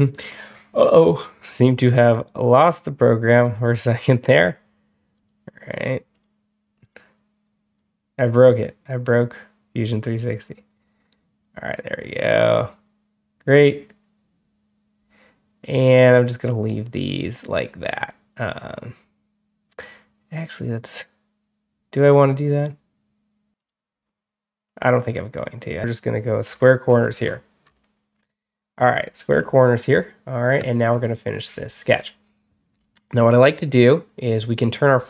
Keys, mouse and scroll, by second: 5.0 click, 6.0 click, 6.7 click, 7.6 click, 23.5 click, 26.3 scroll down 1, 26.7-27.9 scroll up 3, 28.1-29.0 scroll down 5, 29.2 scroll up 2, 30.4 click, 31.6 middle click, 32.6 middle drag.